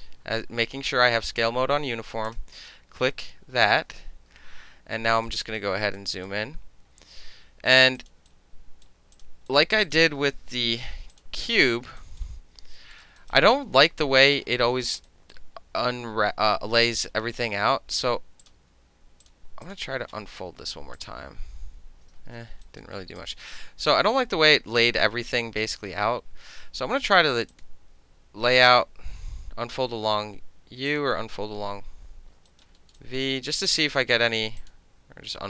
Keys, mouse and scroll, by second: 0.2 middle click, 0.5 middle click, 2.3 click, 5.3 alt+right click, 5.6-6.0 alt+middle drag, 6.0 alt+right click, 6.3-7.7 alt+middle drag, 7.7 alt+right click, 7.8 alt+middle click, 8.0 alt+click, 8.1 alt+middle drag, 8.3-8.9 alt+right drag, 8.9 alt+middle drag, 9.2 alt+click, 9.2 alt+middle drag, 9.5 alt+right click, 9.6 alt+middle drag, 9.8 alt+click, 10.0 middle click, 10.6 shift+i, 11.1 click, 12.0 alt+right click, 12.8 alt+middle click, 13.2 alt+click, 14.1 alt+middle click, 14.7 alt+middle click, 15.1 alt+right click, 16.8 alt+right click, 18.4 alt+click, 19.3 click, 19.7 click, 21.0 click, 22.2 ctrl+z, 22.7 alt+click, 23.2-24.0 drag, 24.0-27.5 middle drag, 27.5 click, 27.6 middle click, 30.9 click, 32.5 alt+right click, 32.8 alt+middle click, 33.1 alt+right click, 34.6 click.